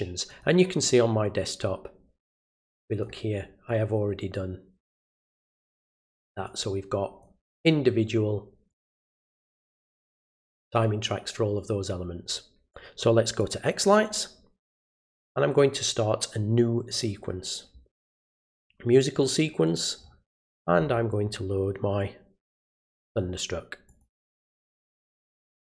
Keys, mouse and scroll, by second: 0.3 click, 2.6 click, 3.7 click, 5.0 click, 6.4 click, 8.7 click, 13.4 click, 16.9 click, 18.5 click, 20.0 scroll down 1, 20.9-22.7 scroll down 2, 22.7 click, 23.9 click.